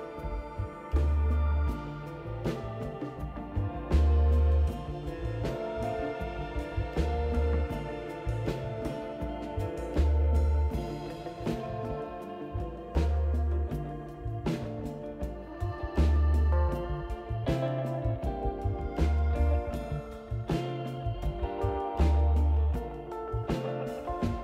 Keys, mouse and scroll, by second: 1.0 click, 2.8 F2, 3.4-7.4 typing, 7.4 Return, 10.4 ctrl+d, 12.0 click, 13.4 click, 14.7 click, 16.0 click, 17.2 click, 19.1 click, 22.9 click, 24.0 right click.